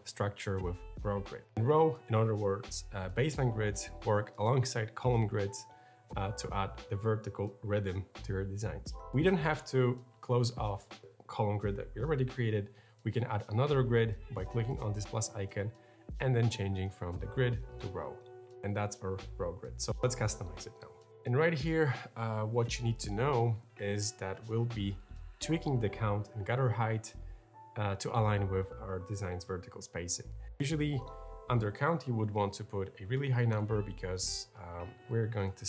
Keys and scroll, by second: 32.6 0, 33.3 Return.